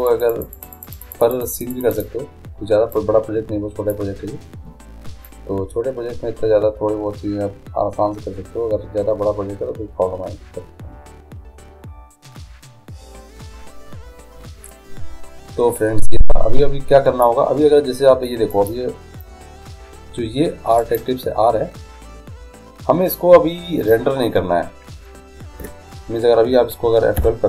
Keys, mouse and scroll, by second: 5.2-7.0 drag, 18.9-20.5 drag, 21.1-22.8 right drag.